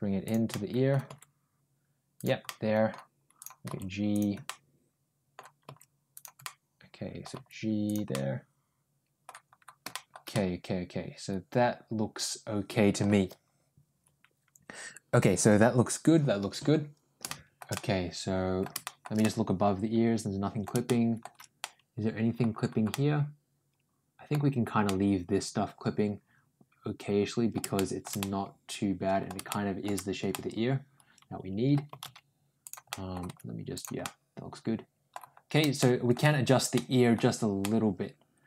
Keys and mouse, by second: 0.3 middle click, 2.3 middle click, 2.3 g, 3.2 click, 3.5 g, 4.3 middle click, 5.5 g, 6.3 middle click, 7.2 g, 7.9-9.1 middle drag, 9.7 middle click, 10.1-12.8 middle drag, 17.1 shift+middle click, 17.6 middle click, 18.6 shift+middle click, 19.0-20.4 middle drag, 20.7 shift+middle click, 21.4 middle click, 22.7-24.1 middle drag, 24.7-27.4 middle drag, 27.6 shift+middle click, 28.0-29.1 middle drag, 29.3 shift+middle click, 30.1-31.5 middle drag, 31.7 g, 32.7 middle click, 33.1 g, 33.8-34.9 middle drag, 35.6 middle click, 36.6 middle click, 37.4 middle click.